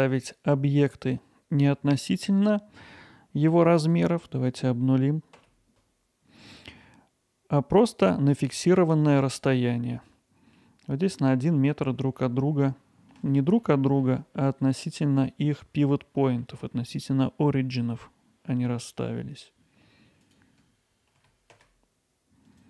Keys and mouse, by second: 3.8-10.6 drag, 13.3 middle click, 20.1-21.8 drag, 22.1 alt+middle click, 22.3 middle click, 22.5 alt+middle click.